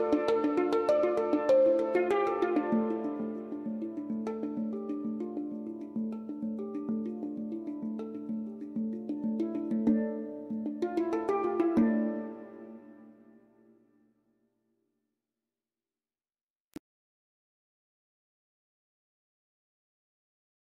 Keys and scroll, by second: 12.7 1, 12.8 Return.